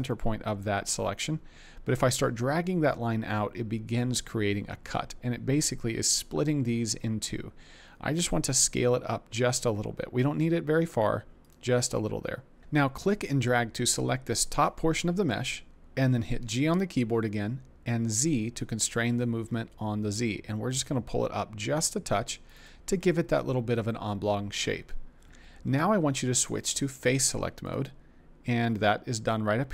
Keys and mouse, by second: 13.0 click, 16.4 g, 18.0 z, 22.5 click, 26.5 click.